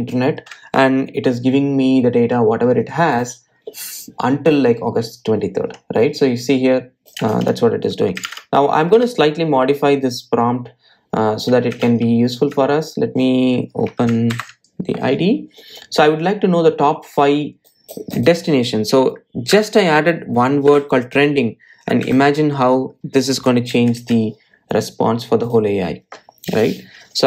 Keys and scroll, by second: 21.0 Delete, 25.1 super+s, 27.0 super+r.